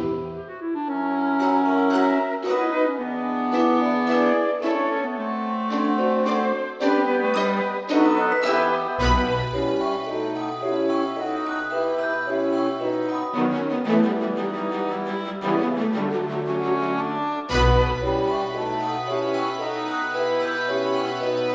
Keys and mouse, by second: 0.5 click, 1.5 Caps_Lock, 2.7 Tab, 2.8 middle click, 3.4 a, 4.2 g, 4.5 y, 6.4 click, 7.3 F6, 8.0 click, 9.6 click, 10.5 Tab, 11.0 middle click, 12.2 middle click, 13.5 click, 16.3 ctrl+z, 16.9 x, 18.1 click, 19.6 click, 20.3 middle click, 20.9 c.